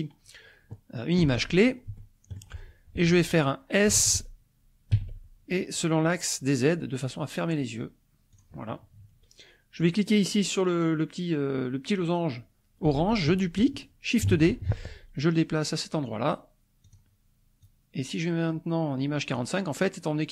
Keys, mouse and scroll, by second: 2.0 shift+click, 3.9 s, 4.9 z, 8.3 click, 9.8 click, 14.3 shift+d, 16.9 click, 17.7-19.6 drag.